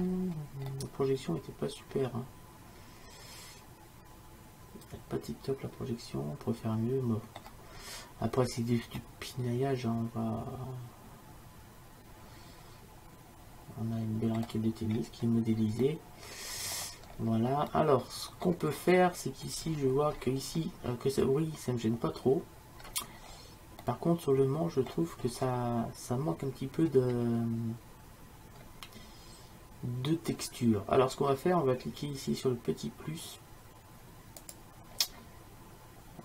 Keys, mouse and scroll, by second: 7.9-11.1 middle drag, 15.0-17.8 middle drag, 19.7 middle click, 21.9-23.2 middle drag, 25.9-27.0 middle drag, 27.4-28.7 middle drag, 34.5-36.2 drag.